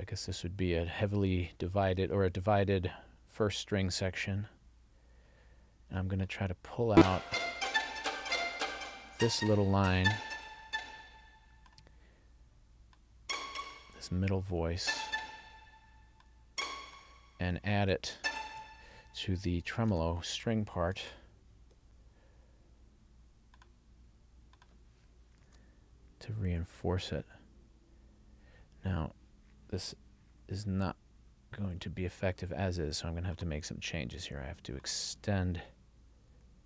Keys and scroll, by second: 21.0 super+c, 25.5 super+v.